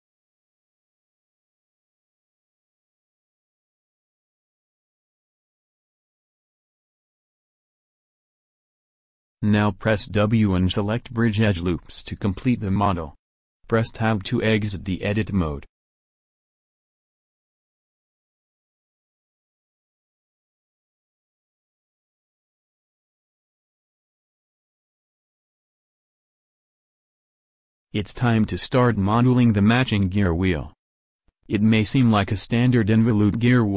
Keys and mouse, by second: 0.7 c, 6.2 c, 11.1 w, 13.2 KP_1, 25.5 Tab.